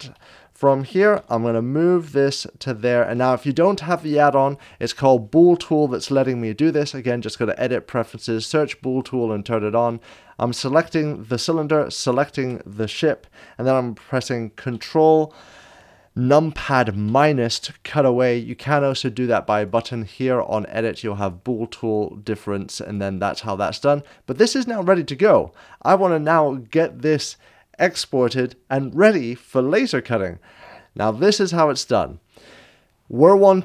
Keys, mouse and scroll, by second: 0.1 Return, 0.1 7, 1.1 g, 2.9 click, 2.9 7, 12.0 shift+l, 13.9 shift+click, 17.0 Return, 17.0 ctrl+[, 17.0 7, 18.9 ctrl+-, 18.9 g, 19.7 click, 19.7 7, 19.7 g, 31.2 click.